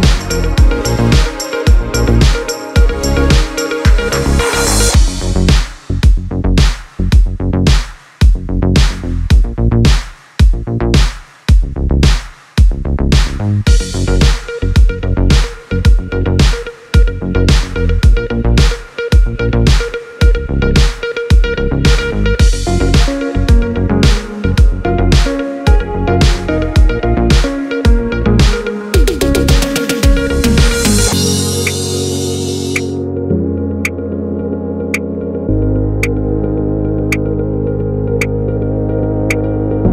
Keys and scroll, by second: 7.8 p, 10.2 [, 27.0 s.